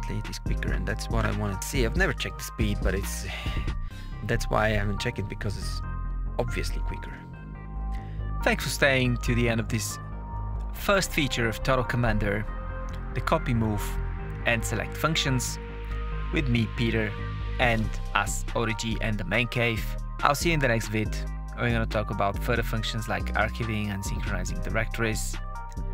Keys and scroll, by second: 8.2 Down, 8.3 Page_Up, 8.7 Down, 9.3 Return, 9.7 Down, 11.6 Return, 12.0 Down, 12.5 Return, 12.9 Down, 13.1 Return, 13.8 Down, 14.0 Return, 15.3 Down, 18.2 KP_Add, 19.1 Return, 20.3 Escape, 21.0 KP_Add, 22.4 Right, 22.7 BackSpace, 23.9 shift++, 24.4 Return, 25.8 shift+Delete.